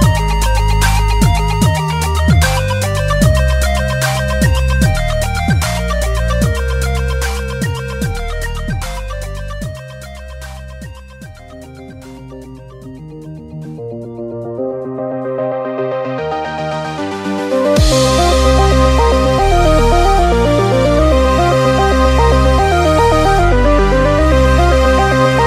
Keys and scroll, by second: 0.0 typing, 0.1 super+=, 2.2 p, 2.5 super+=, 7.2 super+z.